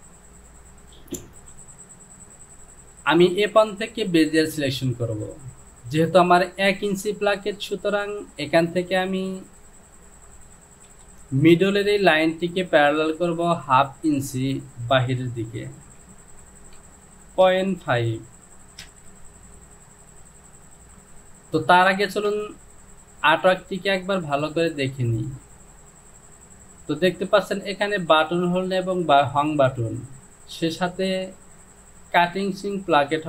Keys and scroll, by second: 10.9 ctrl+z, 16.6 Down, 17.5 KP_Decimal, 17.9 KP_5, 18.9 Return.